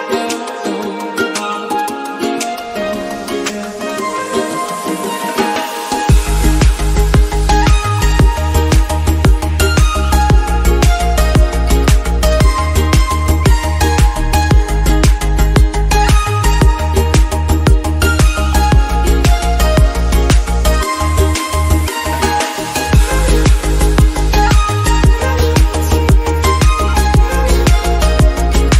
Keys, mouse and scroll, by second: 2.9 click, 3.5-3.9 scroll up 2, 3.9-5.2 middle drag, 5.2-6.2 scroll up 1, 6.2 click, 6.7 click, 8.4 click, 9.6 click, 10.4 KP_0, 11.2 click, 12.1 KP_0, 13.1 click, 15.7 middle drag, 16.0 scroll up 4, 16.9-17.7 scroll up 2, 17.7 click, 22.2 click, 22.4-23.2 middle drag, 23.7 click, 24.0-24.5 drag, 27.1-28.7 drag, 28.0 scroll down 3, 28.2-28.7 scroll up 3.